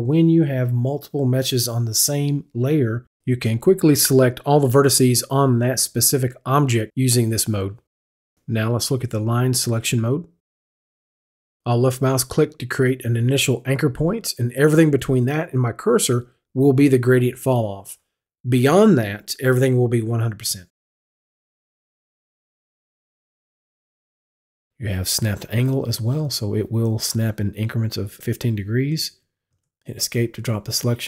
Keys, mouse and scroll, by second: 10.0 click, 10.8 click, 12.2 click, 23.5 click, 25.1 click, 29.5 Escape.